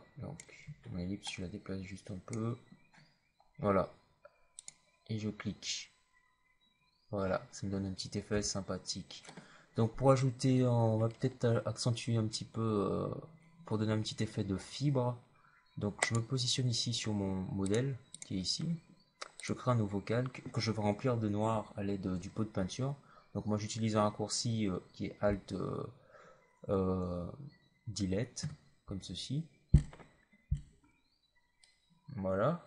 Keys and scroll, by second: 8.2 v, 28.3 alt+BackSpace.